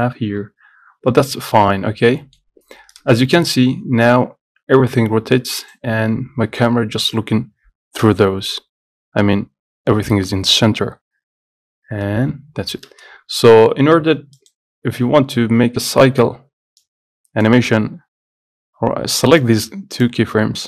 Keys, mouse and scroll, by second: 0.4-0.8 scroll down 12, 1.4 middle click, 1.8 scroll up 1, 2.0 scroll down 1, 2.3 middle click, 3.1 space.